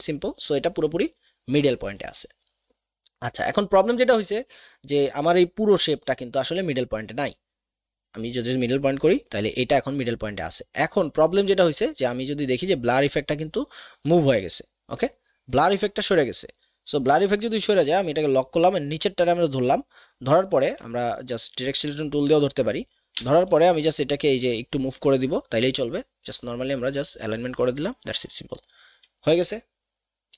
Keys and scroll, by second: 17.7 ctrl+KP_2, 20.7 a, 23.3 v.